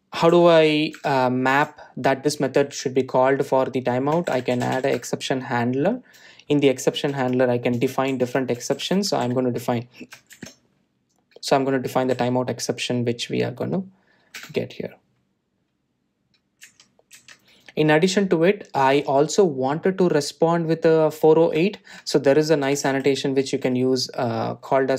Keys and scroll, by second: 6.1 Return, 15.6 Return.